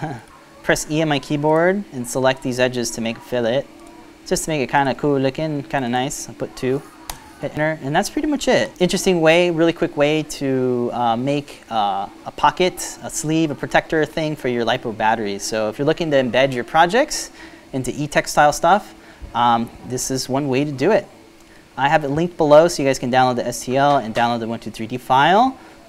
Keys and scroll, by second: 0.4 e, 6.6 2, 8.2 Return.